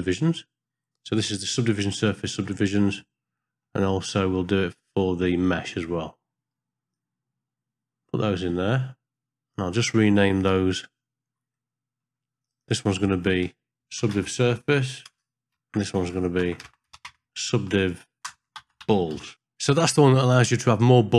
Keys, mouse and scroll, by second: 0.0 click, 0.4-2.1 drag, 2.5 middle click, 3.5 middle click, 6.9 click, 7.2-9.6 drag, 12.4 click, 12.6-20.1 drag.